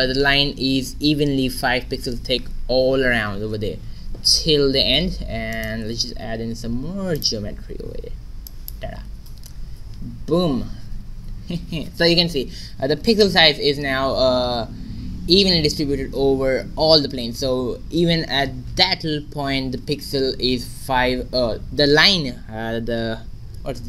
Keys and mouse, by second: 5.0 shift+z, 5.5-7.3 right drag, 5.7 Tab, 6.3 a, 6.4 w, 9.1 a, 9.2 Tab, 10.0 shift+z.